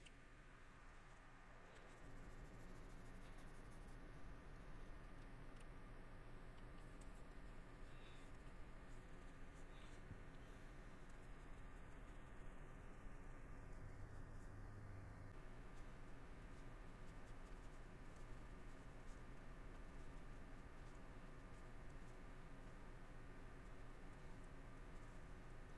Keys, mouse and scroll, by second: 0.1 middle click, 1.2 middle click, 10.3 middle click, 12.5 middle click, 14.5 middle click, 17.8 middle click, 19.2 middle click, 21.0 middle click, 22.1 middle click, 24.4 middle click, 25.2 middle click.